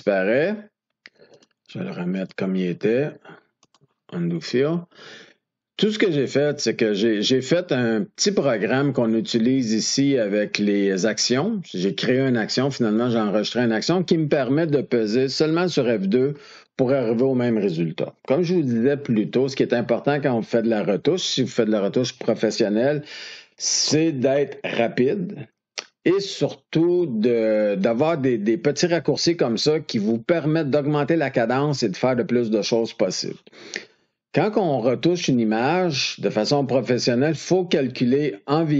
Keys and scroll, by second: 16.1 F2.